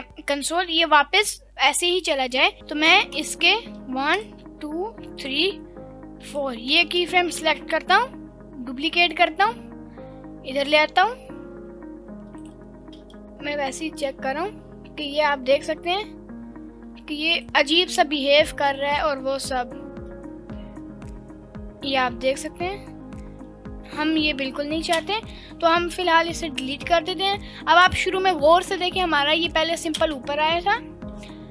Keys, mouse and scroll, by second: 3.1-3.6 drag, 4.1-4.7 shift+drag, 6.2 shift+click, 7.4 shift+d, 12.4 click, 12.8 space, 13.2 space, 13.2-17.4 drag, 17.4 space, 25.0 space, 25.9 Delete, 26.8-27.9 drag, 28.6 space, 30.7 space.